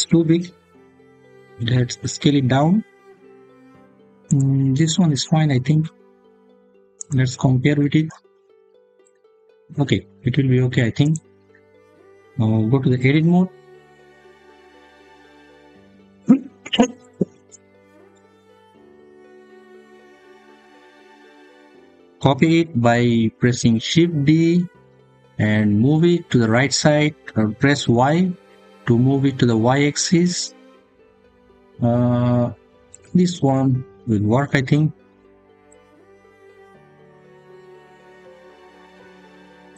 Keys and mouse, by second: 0.7 s, 4.1 click, 6.8 click, 10.8 click, 13.2 Tab, 23.6 shift+d, 27.7 y, 32.7 click, 38.4 shift+middle click.